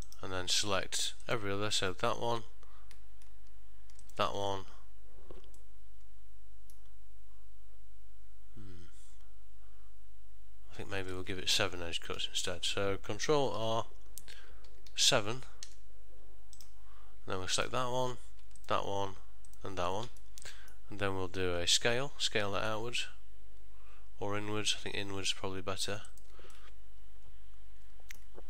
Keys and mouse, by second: 1.3 alt+click, 4.1 alt+shift+click, 5.6 middle click, 17.8 alt+click, 18.8 alt+shift+click, 20.3 middle click, 22.1 s, 26.6 middle click.